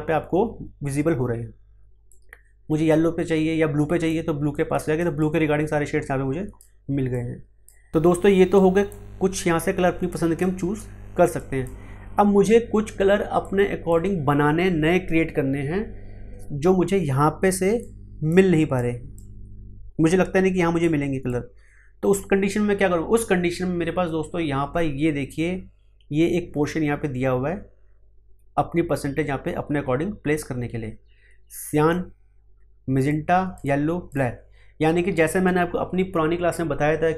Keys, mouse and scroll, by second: 2.0-17.8 drag, 17.8-31.6 drag, 32.5 click.